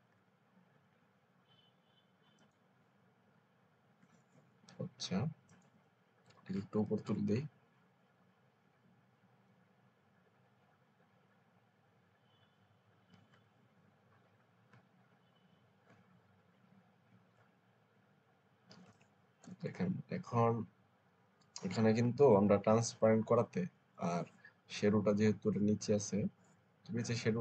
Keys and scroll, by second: 0.0 ctrl+alt+z, 6.6 Up, 6.9 Up, 7.1 Up, 7.5 Up, 7.9 Up, 9.0 Left, 9.3 Left, 9.9 Up, 10.6 Up, 11.0 Up, 12.1 Up, 18.7-19.7 typing.